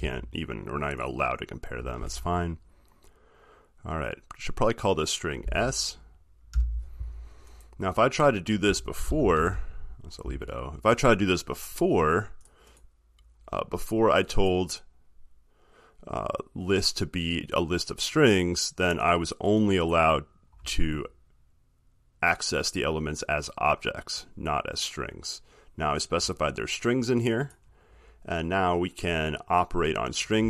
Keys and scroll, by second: 9.6 ctrl+z.